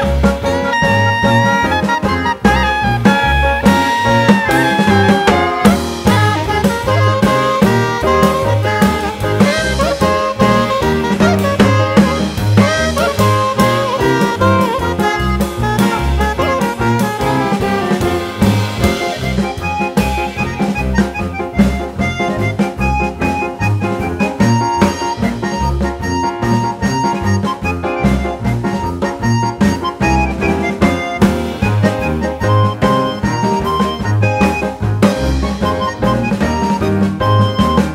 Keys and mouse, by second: 0.3 click, 0.5 r, 0.9 click, 1.5 click, 1.8 r, 2.1 click, 2.7 click, 3.0 r, 3.4 click, 7.1 click, 7.4 r, 7.8 click, 8.2 click, 8.4 click, 8.7 r, 9.2 click, 9.8 click, 10.1 r, 10.5 click, 11.1 drag, 11.5 r, 11.8 click, 12.4 drag, 12.8 r, 13.1 click, 13.7 drag, 13.9 r, 14.3 click, 15.1 click, 15.3 r, 15.7 click, 16.5 click, 16.7 r, 17.0 click, 17.9 click, 18.2 r, 18.7 click, 19.5 click, 19.8 r, 20.1 click, 20.8 click, 21.1 r, 21.5 click, 22.2 click, 22.3 r, 22.7 click, 27.1 click, 29.0-31.1 drag, 32.9 g, 35.6 click, 37.5 click.